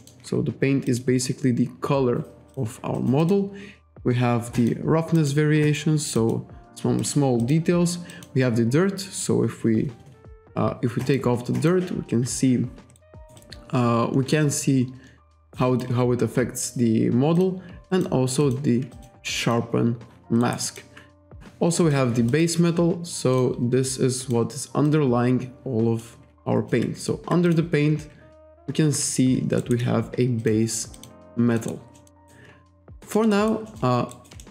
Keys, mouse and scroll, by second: 0.0 alt+middle click, 0.9 click, 2.5 click, 3.0 click, 4.6 click, 5.2 click, 5.6 click, 6.2 click, 7.0 click, 7.4 click, 8.1 click, 11.0 click, 11.6 click, 13.0 alt+right click, 13.4 alt+click, 15.4 alt+right click, 15.6 alt+click, 17.4 click, 17.9 click, 18.4 click, 18.9 click, 19.4 click, 20.4 alt+right click, 20.6 alt+click, 21.8 click, 22.3 click, 23.4 click, 24.2 click, 24.9 click, 27.5 click, 28.4 ctrl+z, 29.6 alt+right click, 30.4 click, 31.0 click, 31.6 alt+right click, 32.0 alt+middle click, 32.2 alt+right click, 32.9 alt+right click, 33.3 alt+right click, 33.7 alt+middle click, 33.8-34.1 alt+scroll up 1, 34.1 alt+right click.